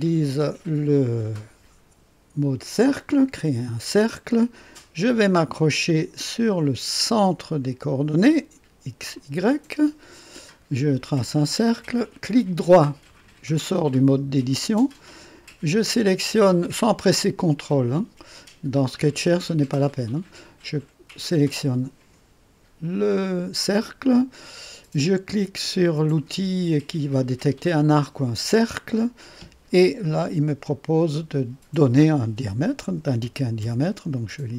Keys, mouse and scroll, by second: 3.1 click, 9.1 click, 11.1 click, 13.0 right click, 21.2 click, 28.2 click, 32.9 KP_1, 33.2 KP_0, 33.6 KP_0.